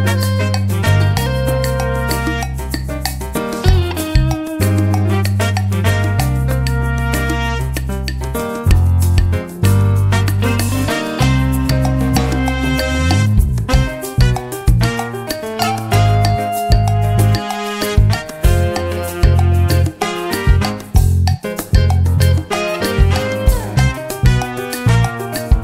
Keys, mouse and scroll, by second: 0.3-1.5 drag, 2.5 ctrl+d, 3.3 click, 4.2-5.3 drag, 5.5-6.6 drag, 7.8-8.9 drag, 9.2-10.7 drag, 11.5 click, 12.1 click, 13.2 click, 13.6 click, 17.8-20.1 drag, 21.1 ctrl+d, 22.2 click, 23.1-24.8 drag, 25.3 click.